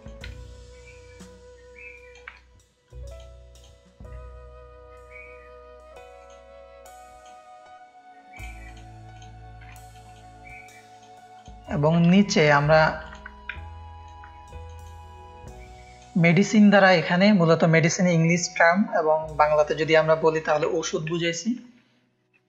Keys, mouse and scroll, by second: 0.4 ctrl+space, 0.4-2.1 ctrl+drag, 3.5-4.7 drag, 6.1-8.5 drag, 8.6 click, 9.7 click, 9.7 space, 10.9 click, 11.3 click, 11.9 alt+shift+click, 13.0 click, 13.4 ctrl+click, 13.5 ctrl+space, 15.5 click, 21.1 o.